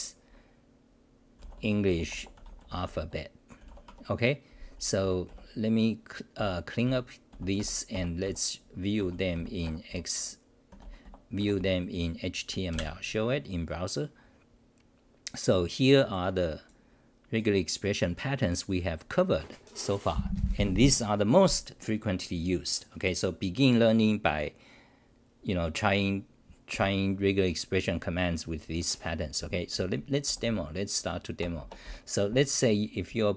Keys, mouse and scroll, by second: 3.9 Home, 5.0-7.8 typing, 12.7 ctrl+r, 30.2 d, 30.4 d, 31.4 Return, 31.8 Return, 31.8 c.